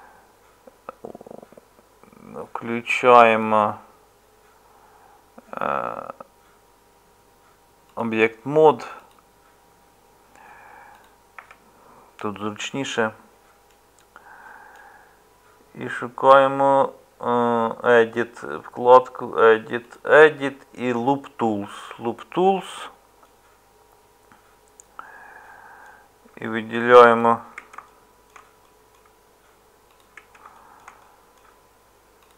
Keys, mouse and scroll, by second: 11.4 Tab.